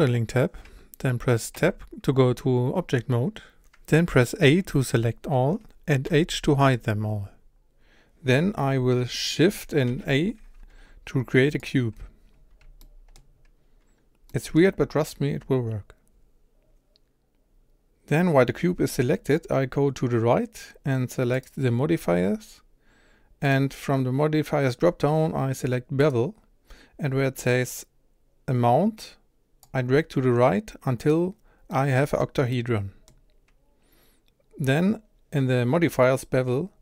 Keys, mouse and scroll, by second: 1.8 Tab, 4.4 a, 6.1 h, 7.3-11.5 scroll down 1, 11.5 scroll down 6, 11.6 shift+a, 12.3-12.8 scroll down 4, 12.8-13.3 shift+middle drag, 13.3-14.3 scroll up 2, 14.3-26.1 middle drag, 26.1-31.7 drag, 31.7-36.8 middle drag.